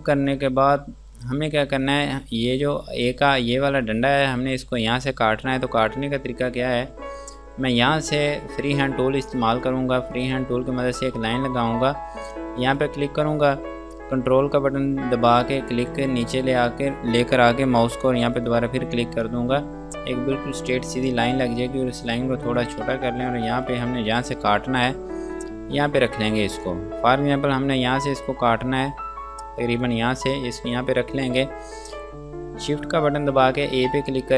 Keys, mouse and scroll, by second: 0.0 F2, 0.5 click, 10.5 click, 19.5 space, 22.1 shift+click, 23.9 click, 26.3 F2, 26.6 click, 30.4 scroll down 1, 31.3 F2, 31.6 click, 34.0 click.